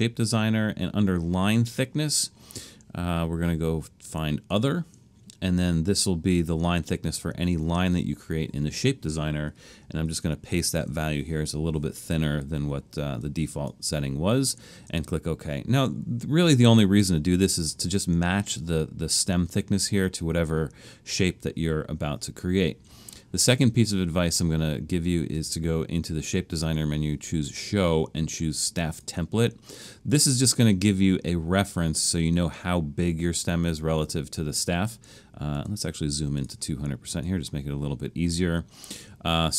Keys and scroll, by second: 10.1 super+v.